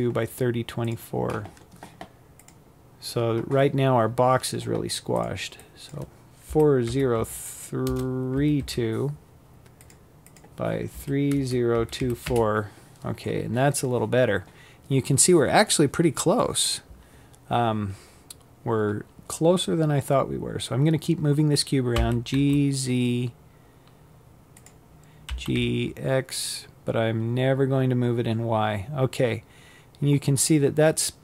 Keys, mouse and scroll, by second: 7.4 click, 9.8-19.7 drag, 19.7 g, 23.0 g, 31.1-31.2 scroll up 5.